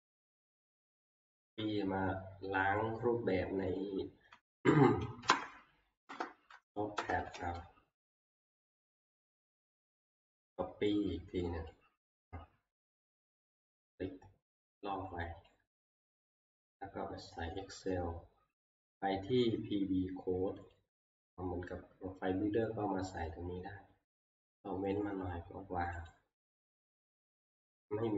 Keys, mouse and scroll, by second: 0.0 click, 0.7 click, 1.0 ctrl+c, 2.9 click, 3.8 click, 4.7 Down, 5.2 Down, 6.1 Return, 7.0 Return, 7.4 ctrl+v, 10.6 click, 11.7 click, 15.4 click, 15.8 ctrl+c, 17.6 click, 20.8 click, 22.7 scroll, 25.0 click, 26.1 right click, 26.2 middle click.